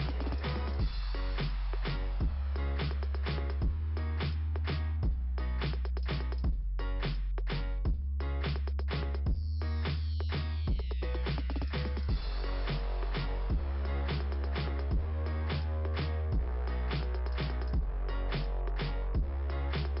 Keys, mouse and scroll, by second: 0.2 right click, 2.9 click, 3.6 click, 5.4 right click, 5.5 right click, 6.5 click, 7.6 right click, 9.5 click, 11.5 right click, 12.7 click, 14.6 scroll up 2, 17.9 ,, 18.5 click.